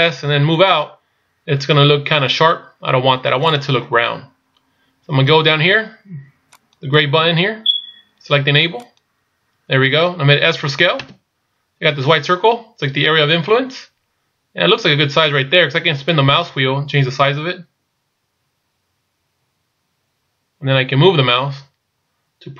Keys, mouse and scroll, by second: 6.6 click.